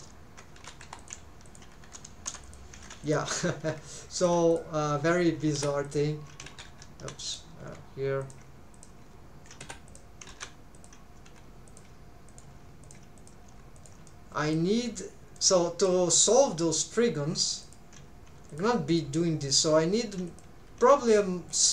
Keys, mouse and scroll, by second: 0.6 alt+a, 0.8 1, 1.0 click, 1.5 shift+click, 2.3 m, 3.0 click, 3.7 shift+v, 4.1 shift+click, 4.5 click, 4.9 shift+v, 5.8 Escape, 5.8 click, 6.5 ctrl+z, 6.7 ctrl+z, 7.2 click, 7.6 shift+v, 8.2 shift+click, 8.8 click, 9.0 shift+v, 9.9 Escape, 9.9 click, 10.3 ctrl+z, 10.7 click, 11.3 shift+v, 11.7 shift+click, 12.3 click, 12.6 shift+v, 12.8 shift+click, 13.2 click, 13.5 shift+v, 13.8 shift+click, 14.1 middle click, 15.4 middle click, 18.1 click, 20.1 shift+click, 20.1 middle click.